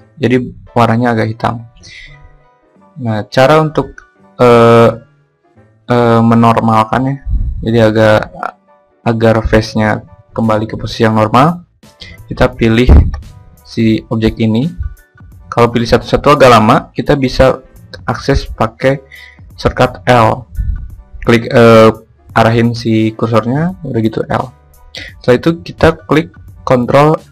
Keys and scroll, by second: 18.4 l, 25.4 ctrl+n.